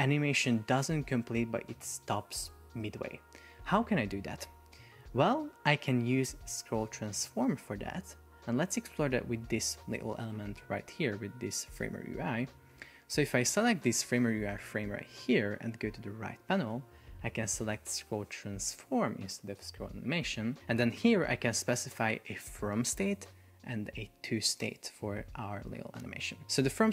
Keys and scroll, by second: 4.8 Escape.